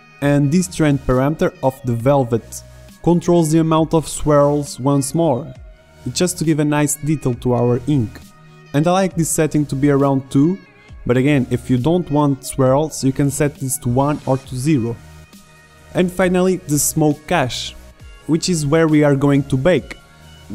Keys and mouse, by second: 3.1-5.2 drag, 5.3-7.3 drag, 18.0-20.5 drag.